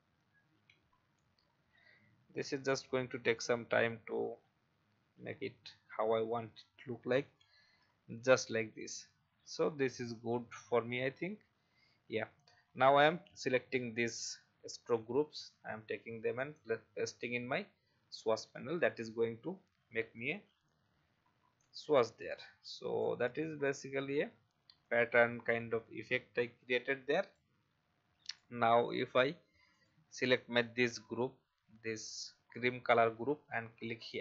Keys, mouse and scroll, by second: 2.7 typing, 6.0 typing, 8.2-8.8 alt+scroll down 1, 8.8-17.4 drag, 20.6 Delete, 21.5-23.5 drag, 24.0 shift+click, 24.8-27.5 drag, 29.0-29.7 alt+scroll up 1, 29.7-34.2 drag.